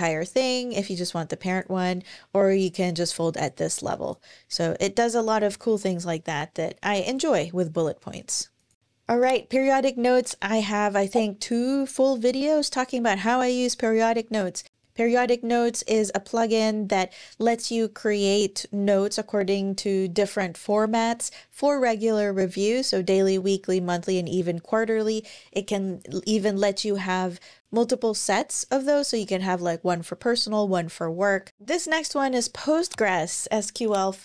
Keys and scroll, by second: 5.3 BackSpace, 6.6 super+,.